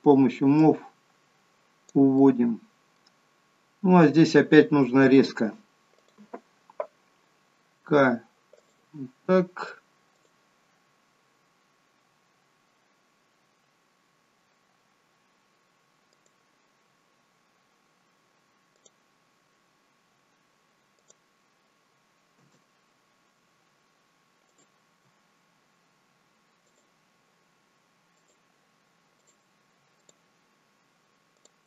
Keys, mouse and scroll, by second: 0.5 click, 2.2 middle click, 3.8-5.2 scroll up 1, 6.0 click, 7.8 k, 24.4 click, 26.6 shift+click, 28.2 shift+click, 29.1 shift+click, 29.9 shift+click, 31.3 shift+click.